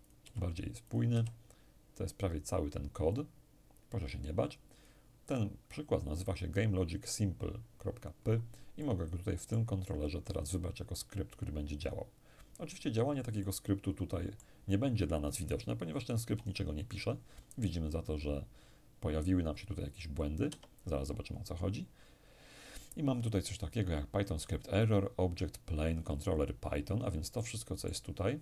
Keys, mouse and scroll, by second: 2.8-5.4 drag, 8.4-11.0 middle drag, 10.0 click, 11.5 click, 13.0-15.0 middle drag, 15.9 p, 20.1 Escape, 21.7-22.4 scroll up 2, 22.4-23.1 scroll up 1, 23.1-23.7 scroll up 1, 27.0-28.4 middle drag.